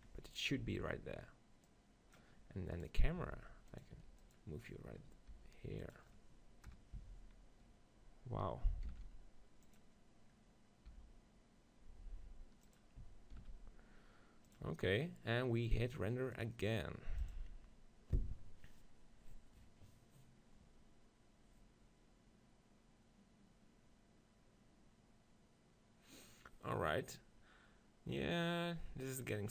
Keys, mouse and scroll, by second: 0.6 middle click, 0.6 z, 1.7-4.2 drag, 2.8 right click, 3.3 g, 3.8 right click, 4.0 r, 4.7-7.7 drag, 5.3 g, 6.8 KP_0, 7.0 z, 8.9 shift+f, 9.8-11.5 drag, 10.9 g, 11.5 middle click, 13.4 shift+f, 14.6-18.2 drag.